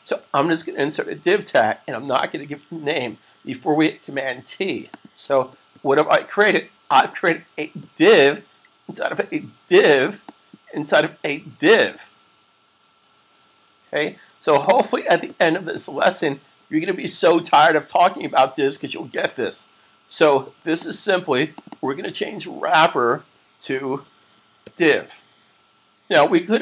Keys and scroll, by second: 24.0-24.5 typing.